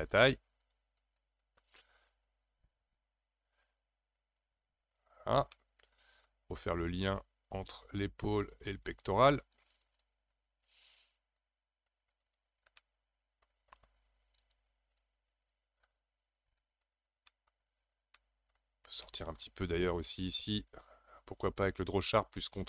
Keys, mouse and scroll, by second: 1.0-5.5 ctrl+drag, 5.5-7.6 middle drag, 7.6-12.8 drag, 12.8-15.0 middle drag, 15.0-17.3 drag, 17.3 middle click, 17.6-18.2 scroll down 2, 18.2 middle click, 18.8 scroll up 3, 19.0 shift+middle click, 19.6-21.4 scroll up 2, 21.4-22.6 drag.